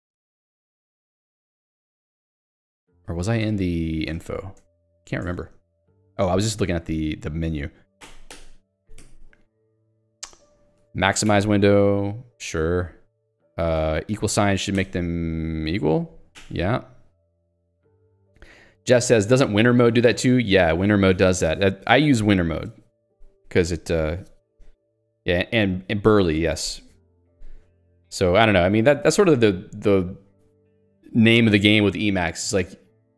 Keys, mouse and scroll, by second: 0.8-1.6 typing, 1.7 Return, 3.0 Return, 3.7 ctrl+alt+j, 4.1 i, 4.6 Return, 5.1 ctrl+alt+j, 5.2 Return, 8.7 s, 9.0 w, 14.8 =, 16.3 y.